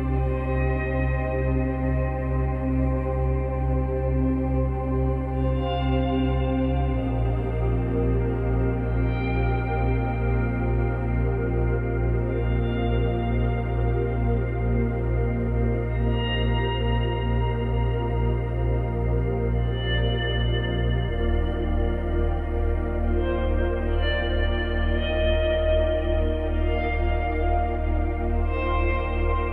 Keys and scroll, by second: 20.4 ctrl+z, 22.8 ctrl+z.